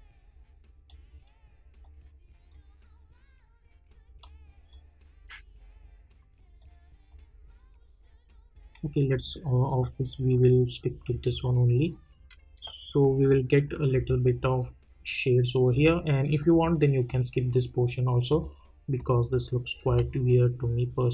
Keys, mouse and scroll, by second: 0.8-9.1 drag, 13.3 click, 13.9 space, 16.4 click, 19.9 space.